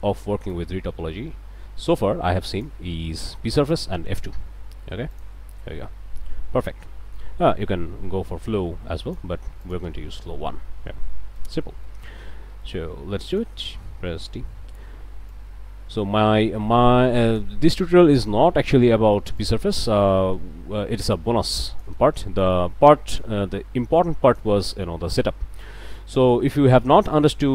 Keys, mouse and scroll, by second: 0.0 d, 0.5-2.8 drag, 3.7 alt+click, 4.7 q, 5.1 click, 5.6-7.4 drag, 8.3-9.4 drag, 9.6 click, 11.0 1, 11.3 Return, 11.8 click, 12.0 scroll up 1, 12.3 a, 12.6 click, 13.3 alt+click, 13.7 alt+click, 14.5 d, 15.3-17.6 drag, 18.2 alt+click, 18.6 alt+click, 18.8 alt+q, 19.4 alt+click, 20.0 click, 24.7 click, 24.9 middle click, 25.4 scroll down 1, 25.7 middle click, 26.2 scroll up 1, 26.5 middle click, 27.1 middle click.